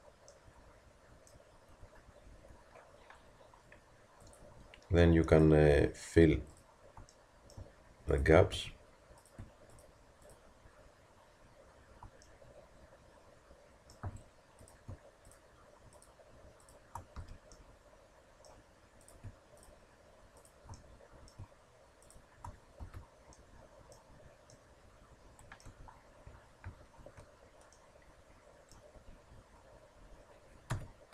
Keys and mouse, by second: 8.6 f, 14.1 a, 17.2 f, 22.8 f, 25.7 Tab, 27.0 alt+h, 28.9 Tab, 30.7 KP_3.